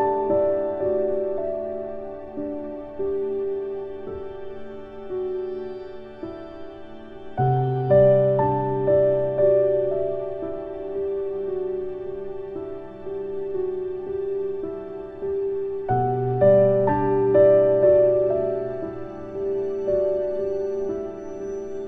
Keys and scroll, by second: 6.0 ctrl+Home.